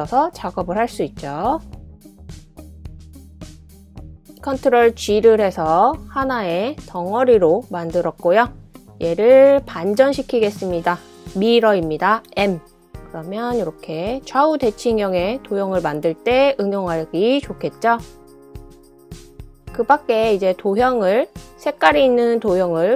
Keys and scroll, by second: 1.0 w, 3.5 typing, 4.6-5.1 typing, 6.7 super+g, 10.2 super+c, 10.6 super+v, 13.3 m, 13.4 m, 15.6 typing, 22.2-22.9 typing.